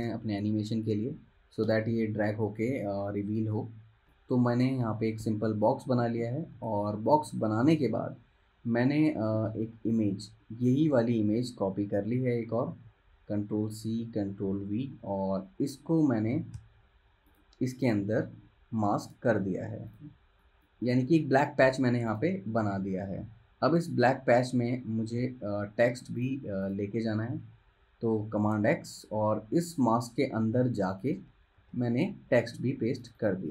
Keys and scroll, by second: 6.7 v, 11.0 super+z, 12.9 super+c, 14.7 super+v, 16.7 super+[, 21.1 super+z, 25.4 super+[, 28.6 super+x, 31.7 super+v.